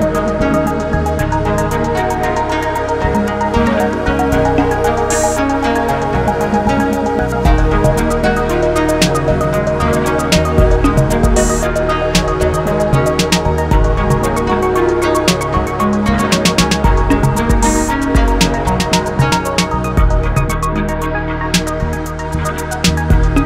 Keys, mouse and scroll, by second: 1.6 click, 2.8 g, 6.0 scroll down 2, 7.3-9.4 middle drag, 9.4-11.0 scroll up 1, 11.0 shift+g, 15.1 ctrl+z, 16.0 shift+g, 19.3-22.3 middle drag, 22.5 middle click, 23.3 click.